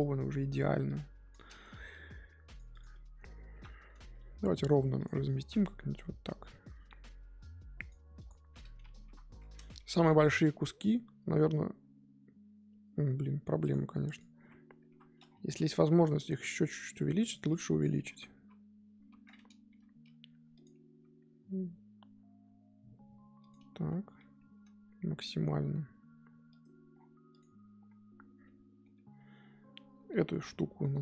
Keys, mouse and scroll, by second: 1.3 click, 1.9 g, 2.8 click, 3.5 l, 4.1 r, 5.1 g, 8.2 click, 9.0 l, 9.7 g, 14.1 click, 14.8 l, 15.7 g, 17.5 click, 18.5 l, 18.9 l, 19.7 g, 20.9 s, 24.2 g, 27.4 click, 29.7 l, 30.6 g.